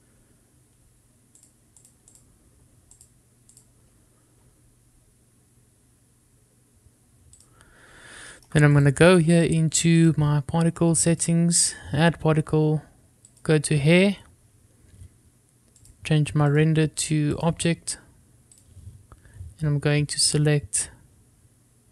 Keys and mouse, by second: 2.6 click, 3.3 click, 4.2 drag, 4.7 click, 8.5 click, 9.5 shift+middle click, 10.0 click, 14.5 click, 17.0 drag, 17.7-18.6 drag.